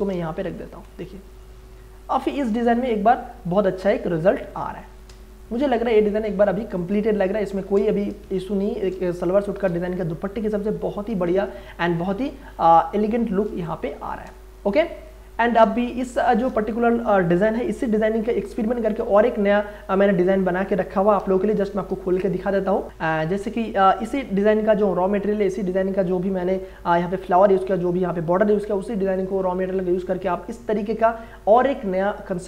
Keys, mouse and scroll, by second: 0.7 Return, 2.0 click, 2.7 ctrl+space, 3.0 ctrl+click, 3.3 ctrl+space, 5.3-6.8 drag, 6.8 click, 7.0 ctrl+space, 7.2 ctrl+click, 7.5 ctrl+space, 8.2 space, 8.4-11.2 ctrl+drag, 11.6 ctrl+t, 12.8 alt+shift+click, 13.7 click, 14.2 Return, 15.0-21.7 drag, 21.7 ctrl+o, 22.8 click.